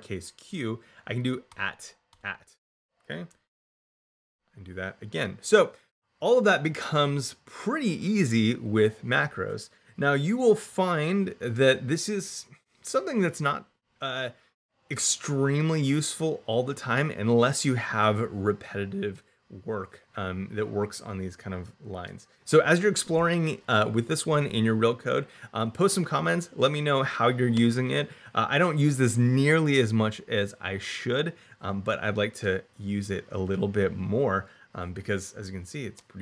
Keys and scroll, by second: 1.3 shift+2, 3.7 shift+2.